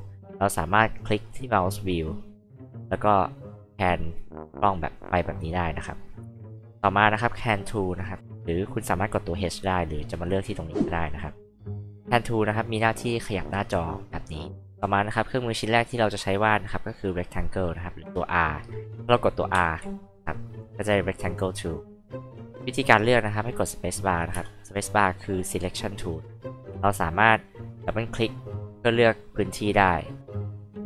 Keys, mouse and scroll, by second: 9.0 alt+click, 10.8 alt+click, 13.1-14.6 alt+drag, 16.6 alt+click, 17.6 alt+click, 19.5 alt+r, 20.5 alt+click, 24.3 alt+space, 26.2 alt+click, 28.1 alt+click, 28.3 alt+click, 29.7-30.1 scroll up 2, 30.1 scroll down 2, 30.3-30.8 alt+drag.